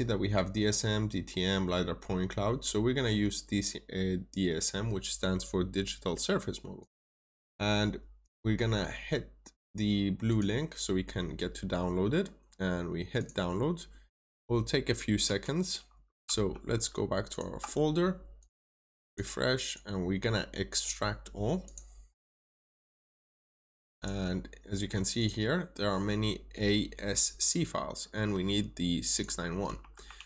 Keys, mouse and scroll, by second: 16.2 alt+Tab, 17.2 alt+click, 18.3 click, 18.5 right click, 19.0 click, 19.6 right click, 20.6 click, 23.2 right click, 23.9 click, 25.1 double click, 25.9-27.6 scroll down 1, 27.6-28.6 scroll up 1, 29.0 click, 30.1 alt+Tab.